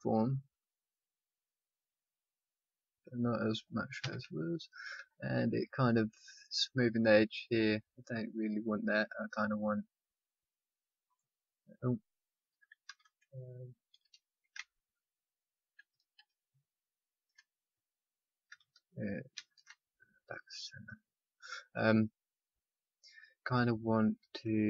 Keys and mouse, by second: 4.0 a, 9.2 r, 11.0-12.6 right drag, 14.1 ctrl+a, 19.3 shift+s, 24.2 ctrl+r.